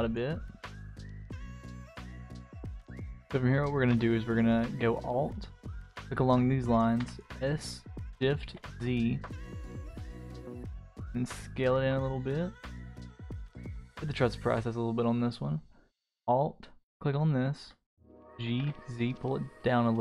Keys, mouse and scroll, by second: 0.3 middle click, 1.4 middle click, 2.8 middle click, 3.6 middle click, 5.7 alt+click, 7.0 s, 13.5 click, 14.7 click, 15.1 middle click, 16.1 alt+click, 18.1 g.